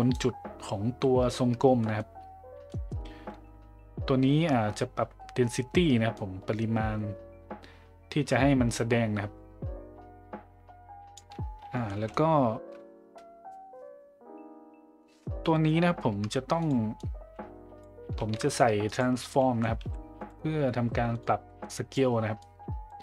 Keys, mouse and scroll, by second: 1.9 middle drag, 2.7 middle click, 6.1-11.1 drag, 11.9 middle click, 16.6 click, 17.0-17.8 drag, 18.2 shift+a, 21.6 click, 22.5 click.